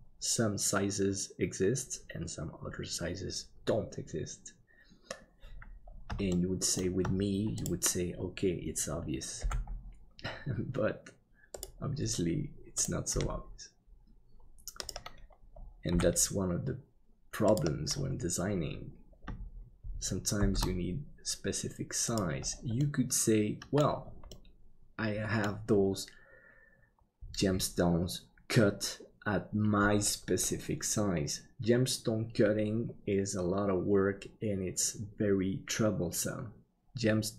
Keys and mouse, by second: 6.4 shift+middle click, 9.4 g, 13.1 g, 15.9 g, 20.4 shift+d, 22.9 middle click, 24.4-25.5 middle drag.